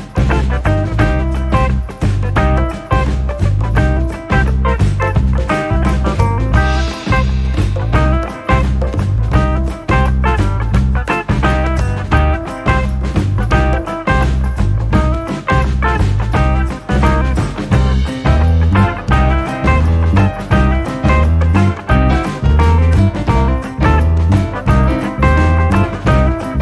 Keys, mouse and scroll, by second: 5.5 shift+a, 15.2 KP_Decimal, 16.3-19.1 middle drag, 19.1 click, 24.4 click, 25.7-26.6 scroll down 3.